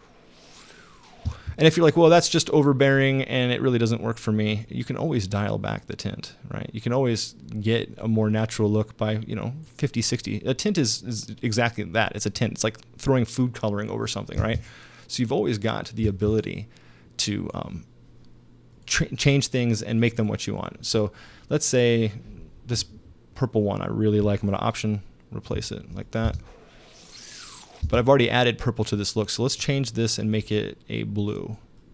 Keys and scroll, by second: 1.3 space, 14.4 space, 16.0 space, 26.3 alt+space, 27.8 space.